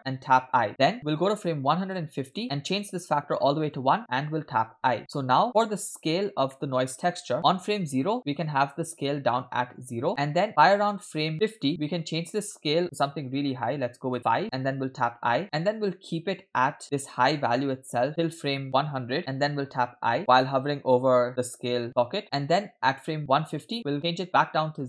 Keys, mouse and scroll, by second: 0.6 i, 2.4 click, 2.8 click, 5.0 i, 5.0 middle click, 5.0-5.4 scroll down 2, 6.5 middle click, 6.8 scroll up 1, 7.7 click, 9.8 click, 11.3 click, 12.2-14.2 drag, 14.8 i, 16.8 click, 19.2 click, 20.0 i, 21.9 i, 23.2 click, 24.0-24.8 drag.